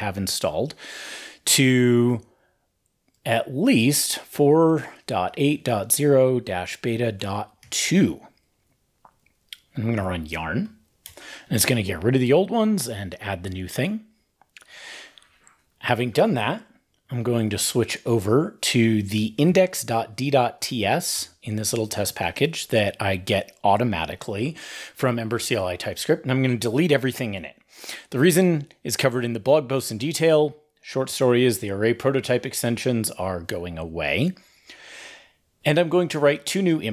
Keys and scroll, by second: 7.4 super+s, 8.9 ctrl+`, 10.4 ctrl+l, 16.4 ctrl+`, 17.0 super+p, 25.5 super+a, 25.7 super+x.